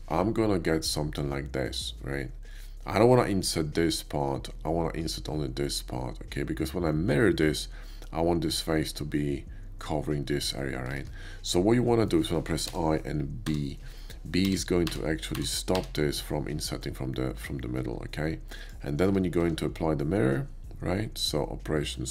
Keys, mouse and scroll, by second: 2.4 click, 11.0 ctrl+z, 11.9 middle click, 12.6 i, 13.4 b, 15.0 b, 15.4 b, 18.6 click, 19.1 Tab, 19.4 q.